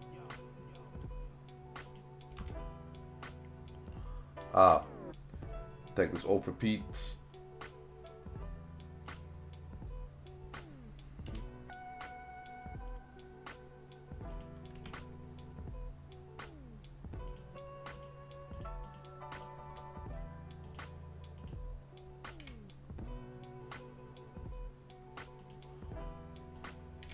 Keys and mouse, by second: 1.9 click, 3.5 s, 4.8 click, 6.1-9.2 drag, 11.3 s, 14.3 click, 14.8 r, 17.3 click, 18.0 click, 18.5 click, 19.3 click, 20.7 click, 21.5 click, 22.4 g, 25.4 click, 27.0 g.